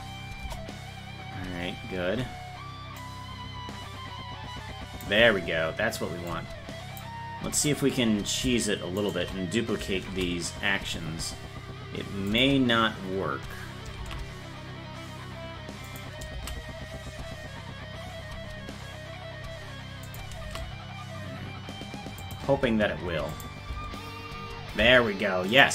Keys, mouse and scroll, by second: 0.4 KP_0, 3.0-5.0 drag, 6.3 click, 7.5 right click, 9.0 shift+right click, 10.1 shift+d, 14.0 shift+d, 23.3 click, 23.7 space, 25.5 click, 25.5 space.